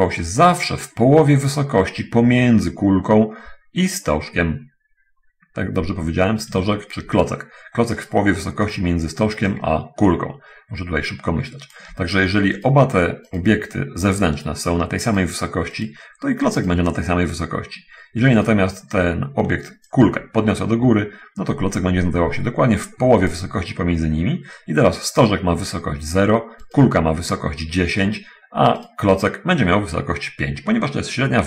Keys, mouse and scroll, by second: 1.0 right click, 1.6-7.2 drag, 8.4 right click, 9.9-11.9 ctrl+drag, 13.0 right click, 13.4-13.8 right drag, 15.4 right click, 16.2 right click, 17.0 right click, 20.3-23.8 ctrl+drag, 29.2 right click.